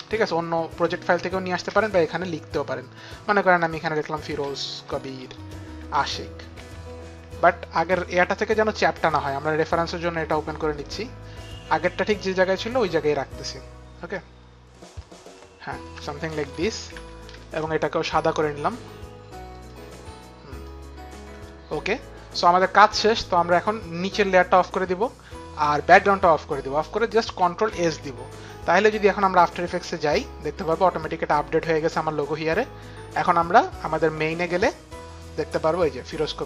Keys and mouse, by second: 1.5-2.3 typing, 3.7-7.1 typing, 8.3 click, 9.6 click, 11.4 click, 14.1 shift+click, 16.0 shift+click, 16.7 shift+Up, 16.7 shift+click, 17.0 shift+Up, 17.0 shift+click, 17.4 shift+Down, 18.4 click, 20.7 shift+Down, 20.7 click, 21.4 Return, 24.4 click, 25.9 click, 27.7 ctrl+s, 29.1 click, 30.0 click, 31.9 click, 34.5 click.